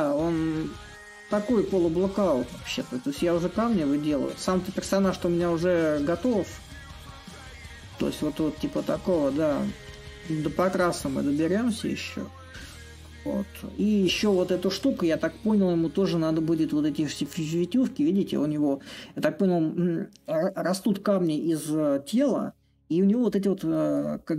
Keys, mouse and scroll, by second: 0.0-5.0 drag, 5.3-10.3 drag, 11.2-21.0 drag, 23.4-24.3 middle drag.